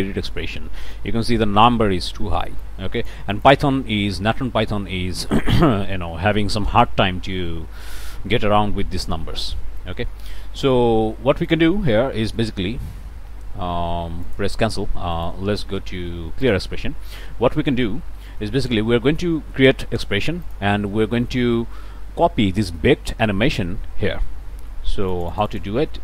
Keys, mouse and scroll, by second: 2.6 click, 3.3 click, 10.6-11.7 drag, 11.8 BackSpace, 14.2 click, 15.2 click, 16.4 click, 17.6-18.1 scroll up 1, 18.1 click, 18.7 click, 20.4 click, 25.1 click, 25.8 0.